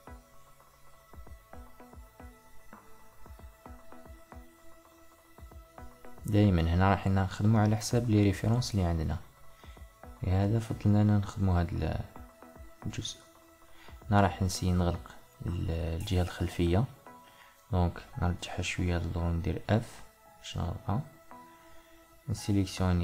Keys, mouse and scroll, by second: 1.1 click, 1.6-4.1 middle drag, 4.1 Tab, 5.8 click, 7.0-10.6 middle drag, 10.6 alt+click, 13.1 2, 14.0 click, 14.5 alt+click, 16.6 g, 19.8 f, 22.2 click.